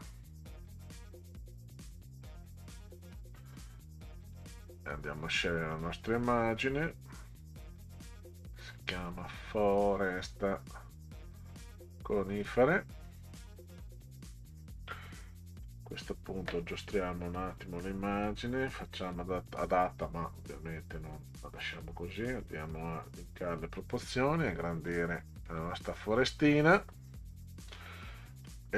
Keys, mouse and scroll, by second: 4.2 click, 4.4 click, 6.6-11.2 drag, 12.0 click, 12.3 click, 17.5 click, 19.0 click, 21.3 click, 22.4 click, 23.8-24.9 drag, 25.4 click, 26.0 click.